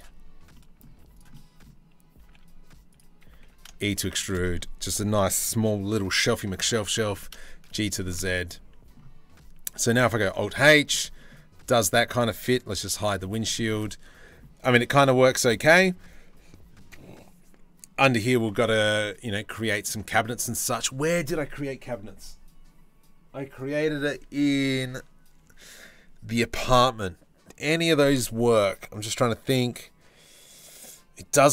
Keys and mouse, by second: 0.5 z, 1.8 g, 3.0 e, 6.3 ctrl+l, 6.6 g, 7.9 Tab, 9.9 alt+h, 12.7 h, 19.4-31.5 drag.